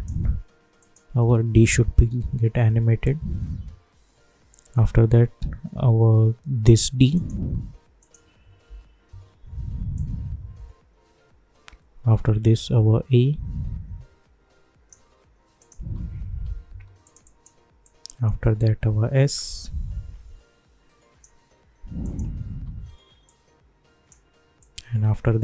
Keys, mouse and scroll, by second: 1.8 [, 3.0-7.1 drag, 8.0 click, 8.6 [, 9.9-15.6 drag, 16.3 [, 17.0-22.0 drag, 22.5 [, 23.2-25.4 drag.